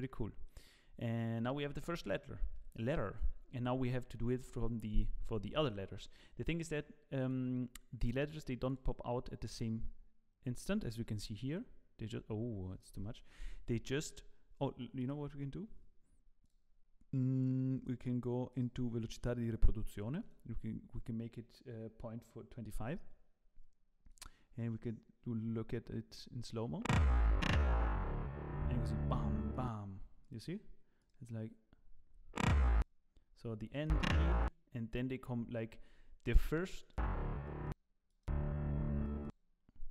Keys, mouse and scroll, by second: 0.4 middle click, 0.8-1.3 scroll down 4, 1.1 middle click, 3.3 scroll up 2.